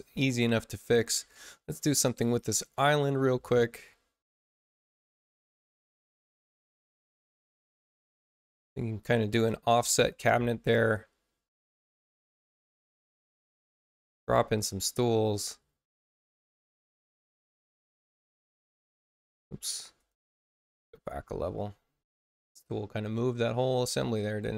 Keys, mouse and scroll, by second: 4.2 click, 5.3 click, 6.2 click, 7.4 click, 11.9 click, 13.1 click, 13.8 space, 14.5 click, 16.3-17.9 drag, 20.1 ctrl+z.